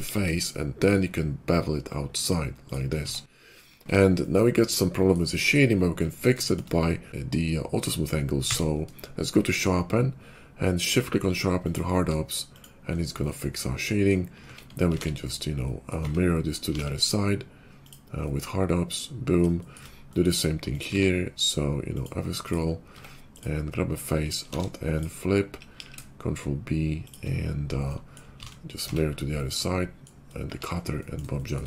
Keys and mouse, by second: 0.0 ctrl+b, 2.9 Tab, 3.6 shift+2, 5.1-6.2 shift+drag, 6.6-11.9 middle drag, 8.4 q, 12.5-13.6 middle drag, 14.4 Tab, 14.9 alt+x, 16.0 Tab, 16.6 alt+x, 17.8 alt+x, 17.8 Tab, 17.8 click, 18.2-19.2 drag, 19.3-22.1 shift+middle drag, 20.9 q, 22.4 middle click, 22.4 q, 22.9 Tab, 23.2 click, 23.3 middle click, 24.4 alt+n, 25.7 ctrl+b, 28.3 alt+x, 28.8 Tab, 30.3 shift+2.